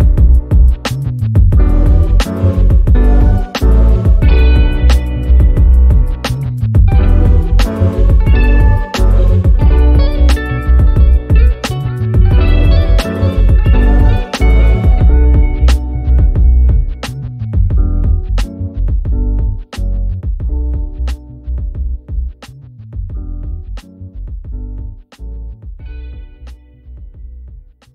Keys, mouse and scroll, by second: 1.1 click, 1.5 ctrl+a, 1.8 4, 2.0 Return, 3.3 click, 4.2 F1, 6.2 shift+F7, 6.4 shift+click, 6.7 F1, 7.1 ctrl+scroll up 2, 7.5-8.1 click, 8.6 F12, 9.3 ctrl+scroll down 2, 10.1 z, 10.4 click, 10.7 F1, 11.2 ctrl+scroll up 2, 11.7 b, 12.4 click, 15.1 Return, 15.5 F1, 17.0-18.2 drag, 18.3 F2, 19.1-20.1 click, 21.9-22.3 click, 22.9 ctrl+shift+f, 24.4 click, 25.7 F12, 26.3 ctrl+scroll down 1, 26.9 F7, 27.4 shift+click.